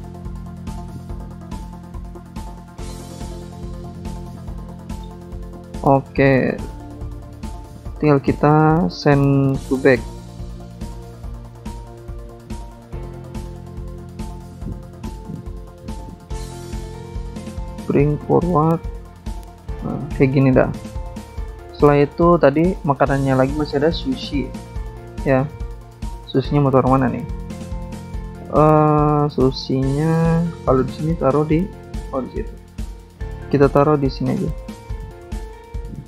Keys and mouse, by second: 0.0 click, 2.3 shift+click, 3.1 click, 3.7 click, 3.9 click, 5.2 click, 5.9 click, 7.4 click, 8.8 click, 8.9 click, 9.9 shift+click, 10.8 click, 12.2 click, 12.4 click, 13.9 click, 14.0 click, 14.1 click, 14.2 click, 14.5 click, 14.6 double click, 15.2 click, 15.3 click, 15.8 click, 15.8 double click, 15.9 double click, 16.0 double click, 16.1 double click, 16.2 double click, 18.5 click, 19.4 ctrl+z, 20.5 click, 20.6 click, 22.2 click, 22.3 click, 23.8 click, 23.9 click, 24.5 click, 24.6 click, 24.7 click, 24.7 click, 25.8 click, 25.9 click, 26.7 click, 29.2 click, 29.3 click, 30.2 click, 30.4 click, 30.5 alt+Tab, 31.2 click, 31.6 alt+Tab, 33.1 shift+click, 34.4 click.